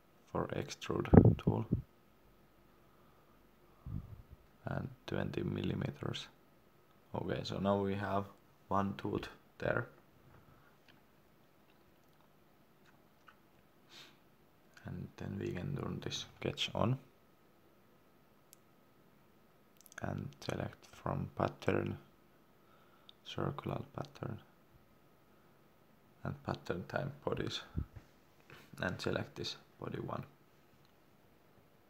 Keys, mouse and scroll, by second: 3.0 shift+middle click, 4.9 2, 7.0 Return, 7.8 scroll up 1, 8.4 shift+middle click, 10.0 scroll down 1, 10.7 shift+middle click, 11.8 middle click, 11.9 middle click, 12.2 scroll up 1, 13.3 click, 14.6 middle click, 17.2 click, 18.1 middle click, 20.0 click, 28.4 scroll down 1, 29.1 click.